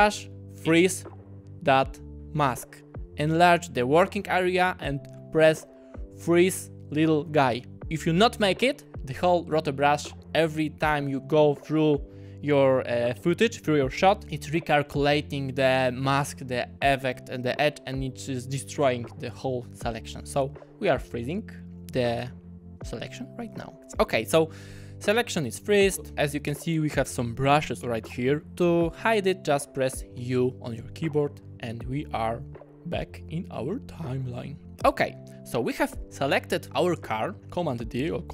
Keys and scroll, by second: 3.3 `, 25.2 `, 30.2 u.